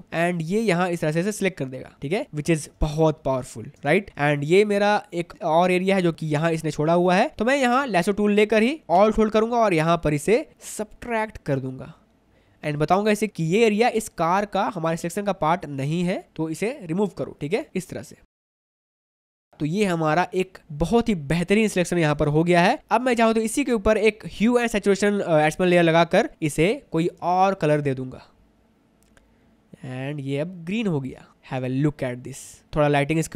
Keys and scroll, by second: 2.9 ctrl+alt+space, 3.4 ctrl+alt+space, 4.1 space, 4.9 ctrl+alt+space, 5.3 ctrl+alt+space, 7.4 space, 19.5 ctrl+alt+space, 20.1 space, 27.3 space, 31.3 space, 32.3 ctrl+alt+space.